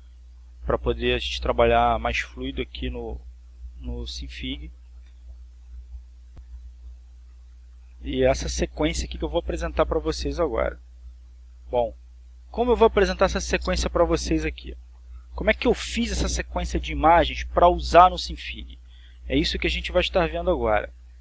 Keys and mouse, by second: 1.2-6.7 drag, 6.9-21.2 drag.